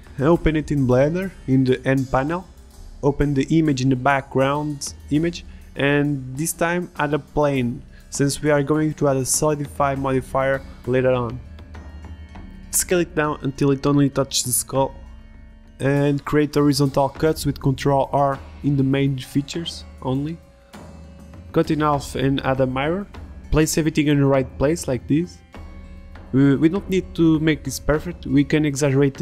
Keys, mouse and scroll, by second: 7.1 shift+a, 8.6 s, 10.0 s, 11.9 Tab, 13.2 Tab, 13.6 Tab, 14.1 ctrl+r, 16.6-21.2 typing, 21.9 ctrl+r, 23.0 a, 23.2 b, 24.6 Delete, 25.0 ctrl+z, 25.0 Tab, 27.6 Tab, 27.7-29.2 typing, 28.7 ctrl+r.